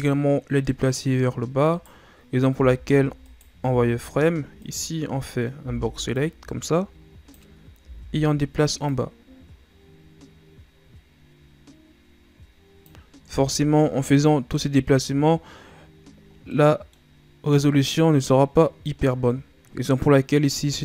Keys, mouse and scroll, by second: 1.7 right click, 2.5 b, 3.7 z, 4.6 right click, 5.5 b, 7.8 z, 8.8-11.9 drag, 13.3 Tab, 13.7-15.0 scroll down 4, 15.0-15.8 scroll up 2, 15.8-16.3 scroll up 3, 16.3 scroll down 2, 16.5-19.5 middle drag.